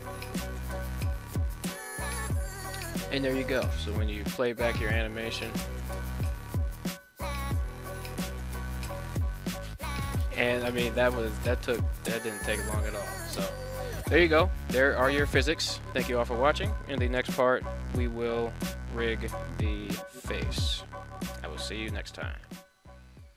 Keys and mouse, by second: 4.2-5.6 drag.